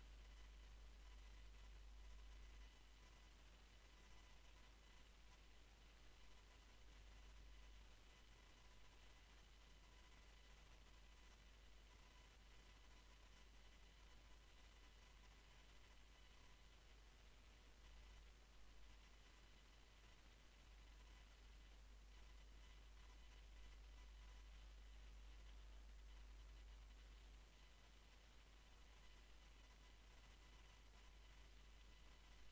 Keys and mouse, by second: 0.4-1.8 middle drag, 1.8 KP_1, 4.4 Tab, 5.6 shift+c, 6.2 shift+a, 8.5 F6, 15.0 r, 16.9-17.3 middle drag, 17.9 click, 18.5 Tab, 19.0 s, 21.8 z, 22.0 z, 22.4 z, 22.8 z, 23.4 Tab, 25.0 Tab, 27.9 e.